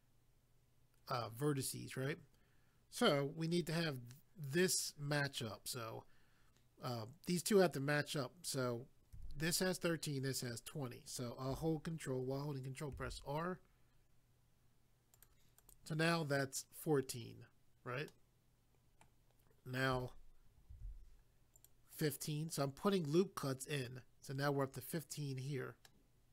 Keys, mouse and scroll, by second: 12.9 ctrl+r, 15.1 click, 15.2 click, 15.6 click, 15.7 click, 18.1 middle click, 20.7 ctrl+r, 21.5 click, 21.7 click, 21.9 click, 22.0 double click, 25.9 middle click.